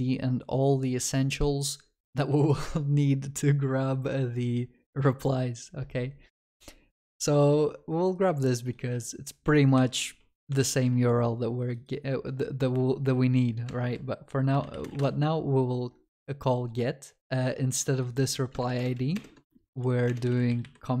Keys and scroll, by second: 9.8 ctrl+c, 14.6 ctrl+v, 18.6 ctrl+BackSpace.